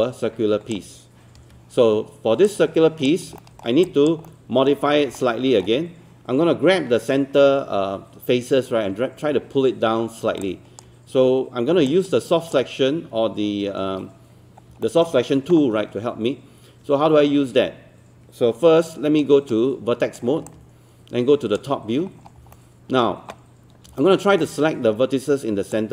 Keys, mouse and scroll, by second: 1.4 alt+w, 2.5 click, 3.4 alt+middle click, 3.4-3.8 alt+scroll up 1, 4.3 alt+middle click, 4.9 scroll up 1, 5.2 alt+middle click, 10.0-10.3 scroll down 1, 10.5 alt+click, 11.9 alt+click, 13.8-14.7 scroll up 1, 14.9-15.9 alt+middle drag, 19.3 right click, 20.5-21.9 drag, 22.1 scroll up 1, 22.5 alt+middle click, 23.3-23.7 scroll up 1, 24.0 alt+middle click, 25.7-25.9 drag.